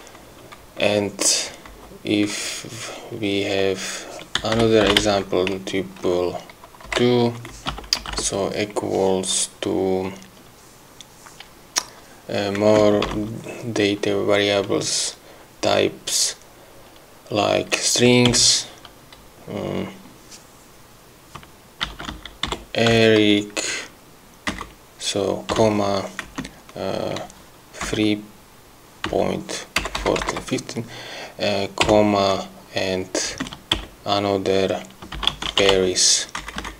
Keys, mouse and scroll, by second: 1.8 Right, 4.3-5.6 typing, 7.0 2, 7.8 space, 7.8 =, 8.1 BackSpace, 12.7 space, 21.7-23.5 typing, 24.6 Right, 26.4 space, 27.9 3, 29.7-30.9 typing, 33.4 space, 35.0-36.4 typing.